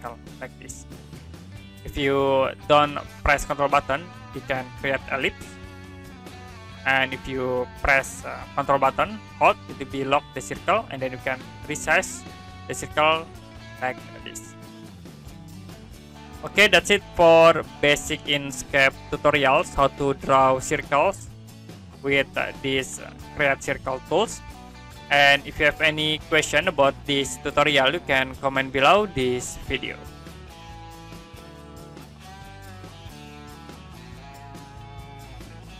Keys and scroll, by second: 30.8 Print.